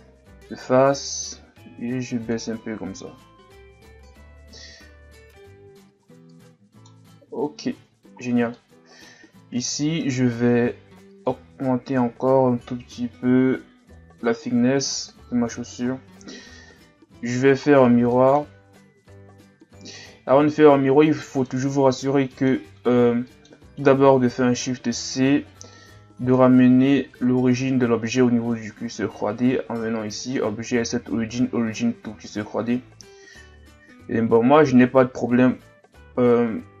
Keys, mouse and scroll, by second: 0.6 click, 2.5 Tab, 3.9 Tab, 4.7 Tab, 4.9-5.8 scroll down 1, 5.8 Tab, 6.1 scroll down 1, 6.3 middle click, 6.9-7.6 scroll down 2, 7.7 ctrl+s, 8.6 middle click, 9.2-9.6 scroll up 1, 9.6 Tab, 11.2 shift+click, 14.9 a, 15.9-16.4 scroll down 1, 16.4 ctrl+s, 17.2 right click, 17.7-18.1 scroll down 3, 18.1-19.5 middle drag, 19.5 click, 20.5-21.2 scroll up 3, 21.2-24.5 middle drag, 24.5 shift+c, 25.4-25.8 shift+scroll down 5, 25.8-26.4 scroll up 4, 26.4-29.4 shift+scroll down 1, 30.2 click, 34.0-36.8 scroll down 4.